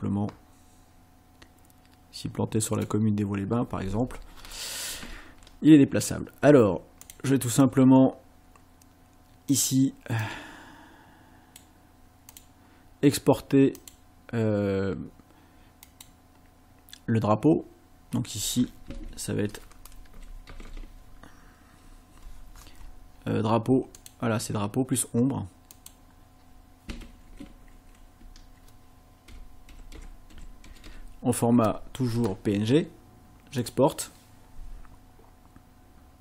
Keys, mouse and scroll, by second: 7.1 click, 7.5 click, 9.5 click, 10.2-11.7 drag, 12.3 click, 13.8 click, 15.9 click, 19.9-21.2 typing, 24.0 click, 25.7 click, 28.2 BackSpace, 29.5-30.9 typing, 33.6 click.